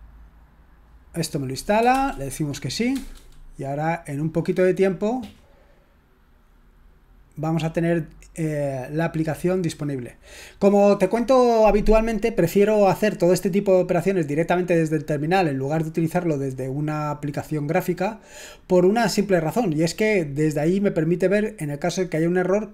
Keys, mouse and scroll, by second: 0.0-0.3 typing, 1.9 shift+s, 2.9 Return, 2.9 typing.